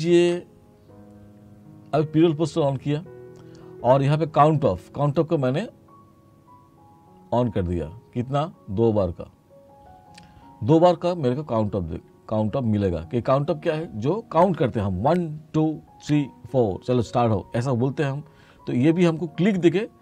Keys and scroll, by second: 0.3 ctrl+z.